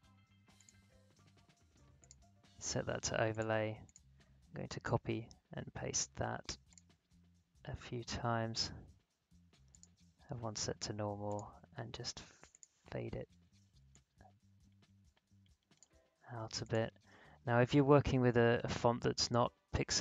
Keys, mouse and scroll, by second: 4.6 ctrl+c, 4.9 ctrl+v, 6.7 click, 9.7-16.6 drag.